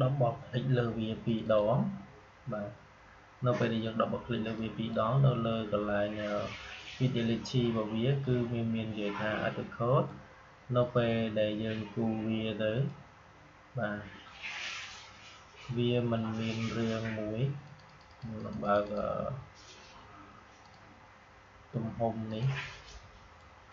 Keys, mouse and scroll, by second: 4.5-8.1 drag, 8.1-17.5 drag, 17.5-23.7 drag.